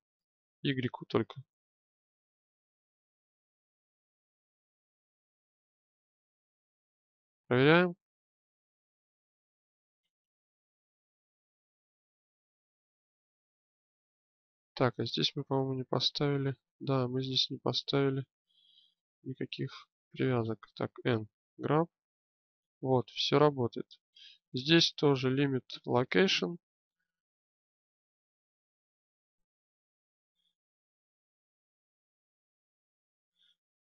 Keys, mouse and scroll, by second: 6.3-7.8 drag, 7.8 g, 15.8 n, 18.0 click, 20.7 n, 21.8 g, 23.4-26.2 drag, 32.4-33.9 drag.